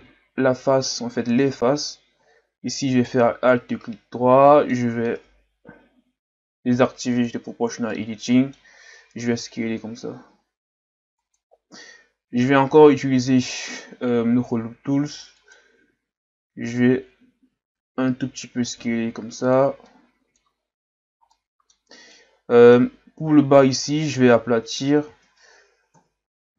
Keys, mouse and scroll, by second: 2.9 alt+right click, 3.7-6.7 middle drag, 7.1 click, 7.9-9.2 middle drag, 9.2 s, 12.7 w, 16.5 w, 18.1 s, 19.9 middle click, 20.6-21.3 scroll down 1, 21.3-23.8 middle drag, 23.8 alt+right click, 25.9 KP_1.